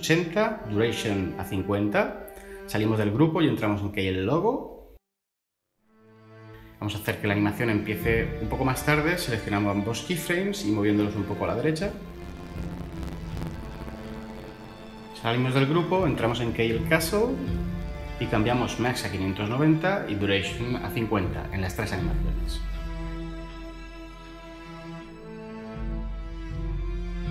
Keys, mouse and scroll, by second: 0.3 typing, 0.6 Return, 1.2 Tab, 3.6 Tab, 15.7 Tab, 17.6 Tab, 19.2-19.5 typing, 19.9 Return, 20.8 typing, 20.9 Return, 23.1-24.3 typing, 23.5 Return, 24.5 Return, 26.8-27.3 typing, 27.2 Return.